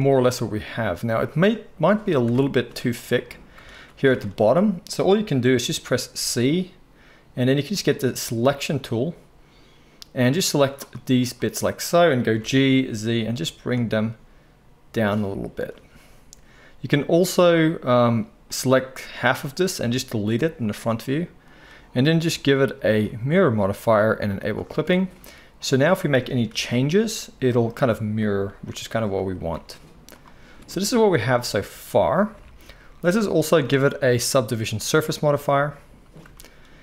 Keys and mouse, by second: 1.0 click, 2.2 Tab, 2.6 z, 4.1 alt+a, 6.2 c, 7.1-11.4 drag, 11.4-18.6 middle drag, 12.3 g, 18.6-24.5 drag, 19.8 x, 24.5-25.6 middle drag, 25.6-28.3 drag, 26.4 r, 28.3-34.1 middle drag, 28.4 g, 29.3 s, 32.3 Tab, 32.8 z, 34.1-36.8 drag.